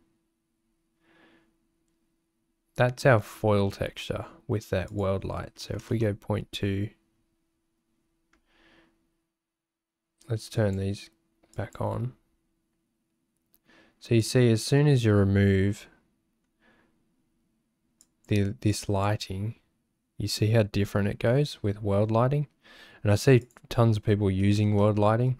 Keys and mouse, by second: 4.9-5.9 drag, 10.5 click, 11.5 click, 18.7-20.2 drag, 23.5-24.6 drag.